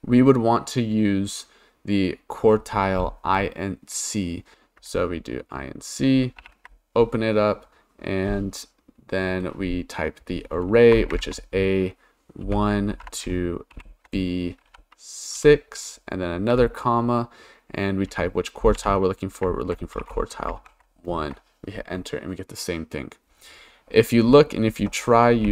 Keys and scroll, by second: 6.4 shift+9, 11.1 shift+a, 12.4 1, 12.9 shift+;, 13.8 shift+b, 15.4 6, 16.5 ,, 18.8 1, 20.0 BackSpace, 20.6 shift+0, 21.2 Return, 25.4-25.5 typing.